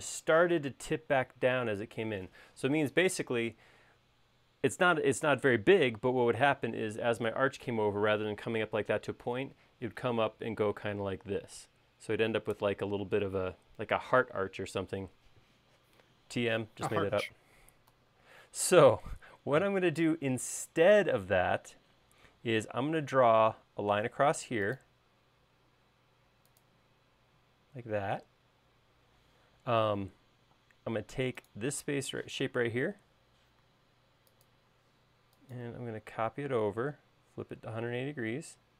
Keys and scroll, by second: 17.6 super+z, 22.4 l, 30.7 space, 32.4 q, 33.7 Left.